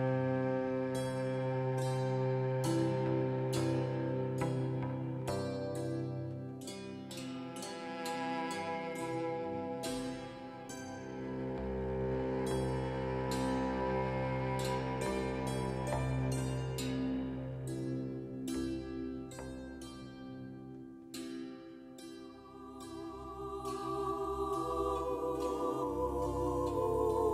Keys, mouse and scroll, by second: 11.9-27.3 drag.